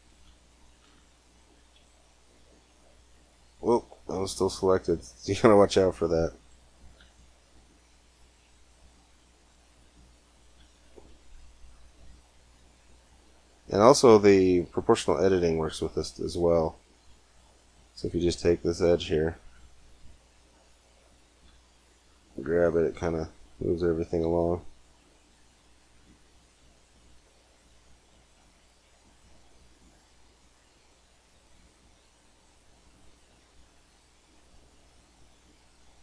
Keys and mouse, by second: 1.3 r, 4.0 c, 5.7 r, 6.6 r, 9.4 middle click, 10.4 g, 11.4 click, 16.2 a, 16.9 c, 18.1 b, 21.3 g, 25.5 g, 29.2-30.9 middle drag, 31.1 g.